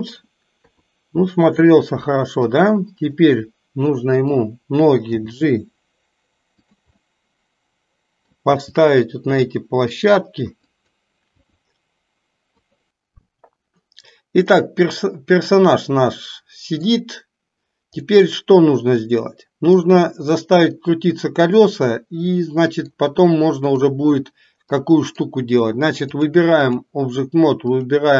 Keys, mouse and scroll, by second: 0.5 KP_3, 2.5 click, 3.3-4.4 middle drag, 5.1 g, 7.0-8.4 middle drag, 8.5 g, 11.4 r, 14.6-17.0 middle drag, 18.1-20.0 middle drag, 21.8-23.1 middle drag, 23.6 click, 24.7-25.4 middle drag, 26.1-27.0 drag, 27.7 click.